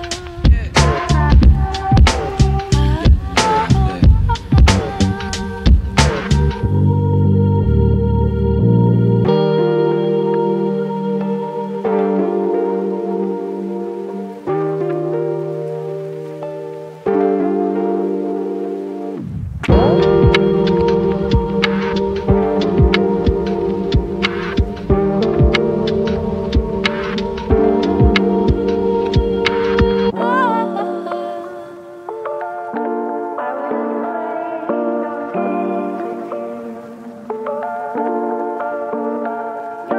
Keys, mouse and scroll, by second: 1.3-5.6 drag, 5.8 typing, 7.8-8.1 scroll down 1, 8.2 right click, 8.2 typing, 8.8 scroll up 1, 10.3 ctrl+click, 14.7 right click, 16.7 click, 18.7 ctrl+d, 19.5 click, 20.6 right click, 22.4 click, 22.9-25.3 right drag, 25.3 scroll down 1, 25.8 right click, 31.4 click, 31.4 typing, 32.2-32.8 scroll down 1, 33.9 right click, 35.3 click, 36.4 scroll up 1, 38.6 space.